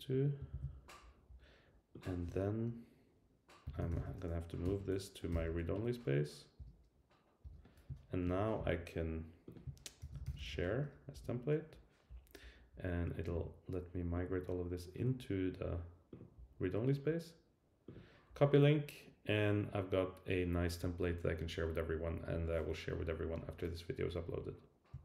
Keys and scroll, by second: 0.5 super+v, 3.6 super+k, 4.6 Return, 6.6 Return, 10.0 super+k, 11.1 Return.